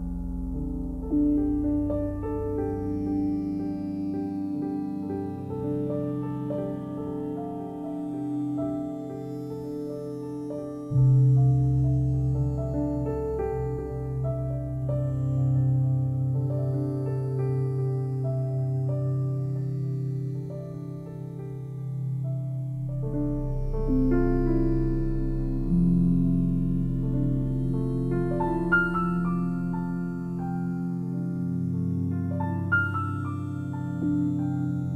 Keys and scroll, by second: 1.3 Return, 5.2 ., 5.6 1, 6.1 Return, 10.4 Escape, 19.2 c, 28.8-30.1 typing, 34.4 Return.